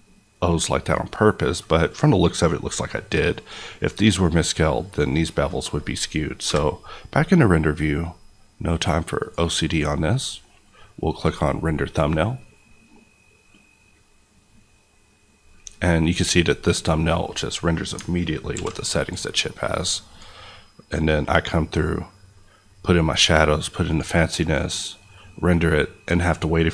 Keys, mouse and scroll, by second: 6.8 KP_0, 9.1 click, 16.2-16.8 scroll up 1, 16.8-17.2 scroll down 1, 17.2 scroll up 1, 18.6 alt+v, 19.7 click.